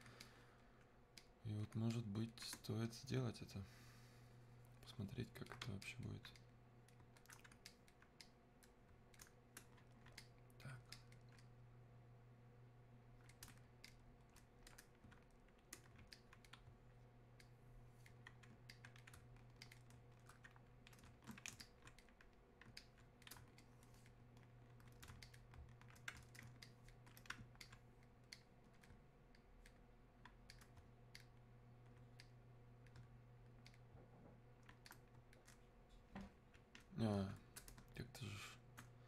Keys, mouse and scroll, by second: 21.5 alt+space, 21.6-23.6 alt+drag, 23.6-29.4 ctrl+shift+drag, 32.2-38.0 shift+drag.